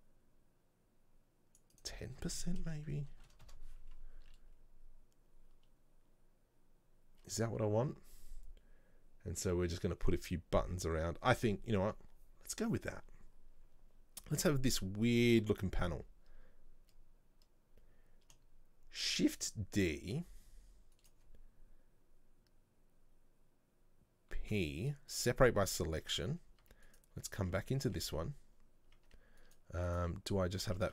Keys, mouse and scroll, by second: 1.8-4.9 drag, 8.3 scroll up 2, 19.1 shift+d, 26.7 Tab, 27.0 right click, 27.5 Tab, 28.0 a, 29.1 Tab, 29.5 right click, 30.0 right click, 30.8 Tab.